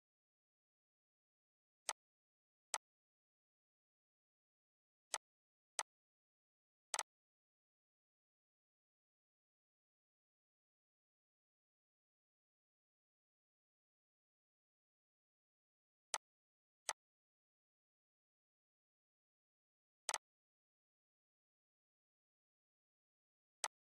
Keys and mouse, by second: 1.5-4.7 drag, 6.6 right click, 7.8 Right, 9.8 Up, 10.2 Right, 12.0 Left, 12.3 Right, 15.8-19.4 drag, 19.8 right click, 21.2 ctrl+z, 23.2 click.